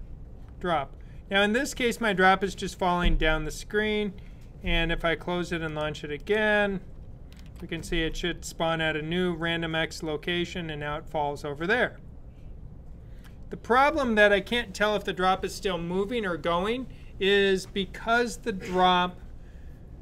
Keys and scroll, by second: 7.2 super+b.